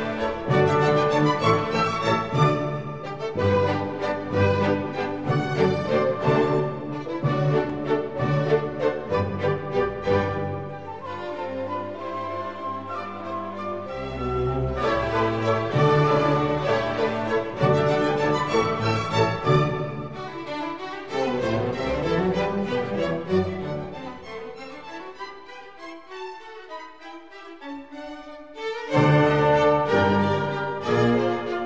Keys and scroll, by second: 26.3 g.